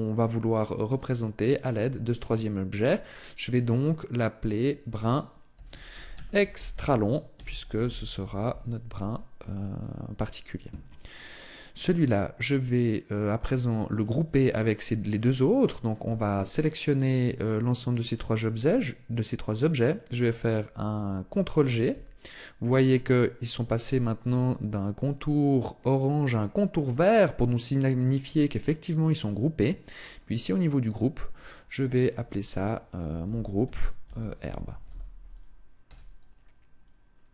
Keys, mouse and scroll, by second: 2.7 click, 11.5 right click, 13.1 shift+right click, 21.0 ctrl+g, 26.5 right click, 27.3 right click, 28.9 right click, 29.7-30.4 scroll down 1, 30.7 click, 30.7 scroll down 4.